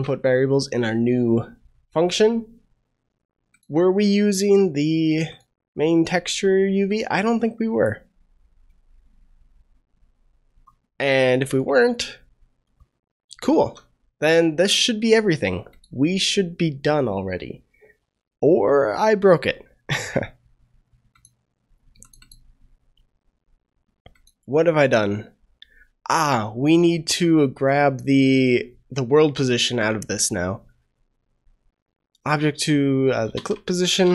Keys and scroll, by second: 13.5 ctrl+s.